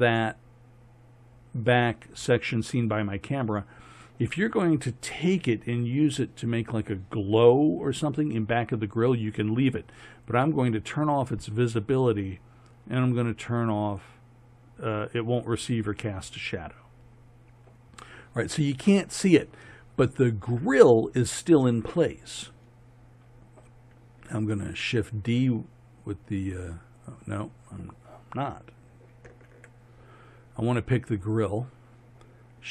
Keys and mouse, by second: 24.9 shift+d, 29.4 ctrl+z, 31.3-32.7 drag.